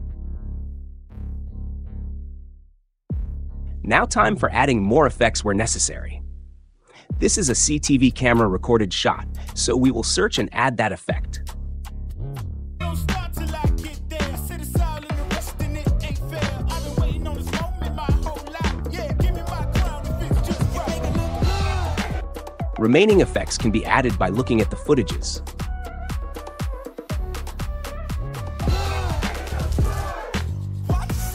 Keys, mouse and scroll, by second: 0.4 click, 3.6-4.6 drag, 8.1-9.2 typing, 8.4 click, 10.9 click, 12.1 click, 12.4 click, 12.7 space, 22.1 space, 23.1 space, 23.3 space, 23.7 click, 24.9-25.3 drag, 26.1 drag, 26.7 click, 27.0 click, 27.0 space, 27.3 click, 28.5 space.